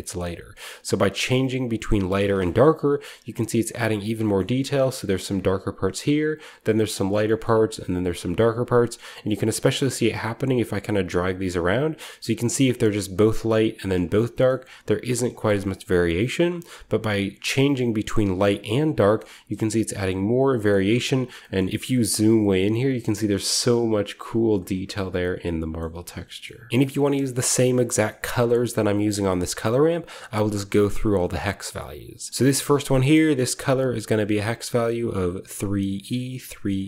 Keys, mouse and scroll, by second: 0.5-1.6 drag, 1.6 middle drag, 1.7 click, 2.5-3.6 scroll up 1, 2.6-3.6 middle drag, 4.3-5.7 shift+scroll up 1, 4.4-5.7 middle drag, 7.1-8.3 shift+middle drag, 8.3-8.7 scroll down 1, 11.1-12.3 drag, 14.0-15.9 scroll down 1, 14.4-15.9 shift+middle drag, 16.2-17.1 drag, 18.0 click, 18.4 click, 19.1-19.9 shift+scroll up 1, 19.1-20.4 shift+middle drag, 19.9-24.6 shift+scroll up 3, 20.7-21.3 shift+middle drag, 21.5-21.8 shift+middle drag, 22.1-24.6 shift+middle drag, 24.6-25.7 scroll down 2, 25.1-26.7 shift+middle drag, 25.7-26.7 shift+scroll down 1, 26.7 ctrl+v, 26.9 shift+middle click, 28.0-28.7 shift+scroll up 1, 28.4 shift+middle click, 28.7 middle click, 28.7-29.4 scroll down 1, 29.4 click, 32.3-32.7 scroll down 1, 32.6 click, 33.2 click, 34.2 click.